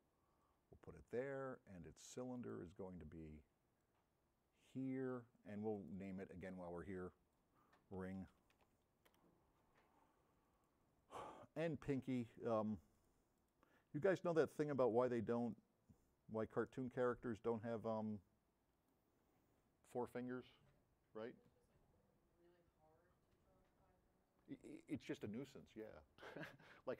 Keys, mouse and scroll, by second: 3.9 m, 8.3 r.